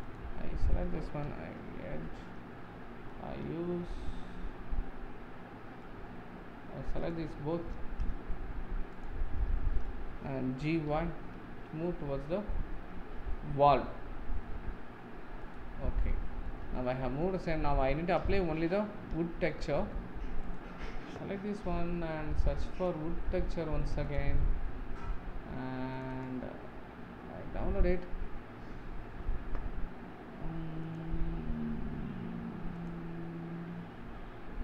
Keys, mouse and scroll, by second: 0.1 click, 1.3 KP_Decimal, 2.0-9.0 middle drag, 7.1 shift+click, 9.0 shift+click, 9.5-10.7 middle drag, 10.7 g, 15.8 scroll down 2, 16.1-17.5 middle drag, 17.5-17.9 scroll up 3, 17.9-20.5 middle drag, 20.5 click, 22.8 click, 24.2-27.2 drag, 30.8-34.6 drag.